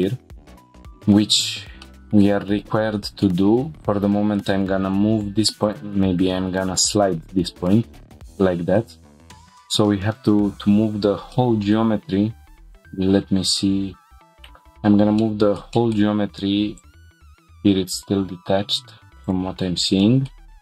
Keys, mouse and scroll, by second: 0.5 shift+middle click, 0.5 scroll down 4, 0.9-1.8 scroll up 2, 1.8 middle click, 2.5 click, 3.7 g, 3.9 y, 5.6 right click, 6.4 g, 7.6 click, 7.9 middle click, 8.4 shift+middle click, 9.0 middle click, 9.3 scroll down 3, 10.2 scroll down 2, 10.8 scroll up 3, 11.3 middle click, 15.2-15.6 middle drag, 15.7 shift+middle click, 20.0 shift+middle click, 20.4 scroll down 1.